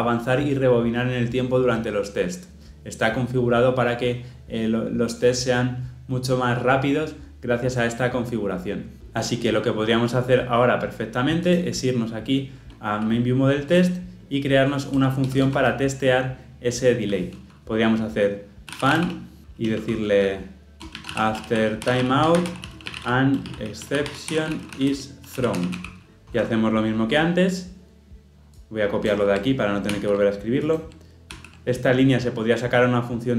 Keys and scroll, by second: 29.9 ctrl+c, 31.3 ctrl+v.